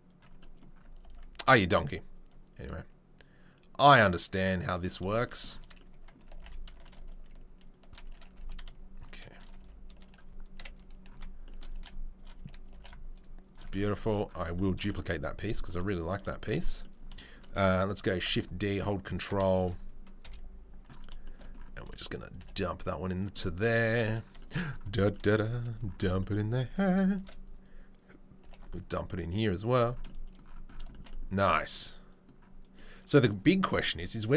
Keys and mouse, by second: 0.2-2.1 middle drag, 2.1-4.9 drag, 4.9-11.0 shift+middle drag, 6.3 g, 8.1 g, 9.6 s, 10.5 KP_7, 11.7 g, 12.3 s, 12.7 g, 13.6-18.4 middle drag, 18.1 shift+d, 18.4 ctrl+click, 19.2-34.3 shift+middle drag, 20.2 KP_3, 21.7 s, 22.3 g, 27.2 shift+d, 28.4 g.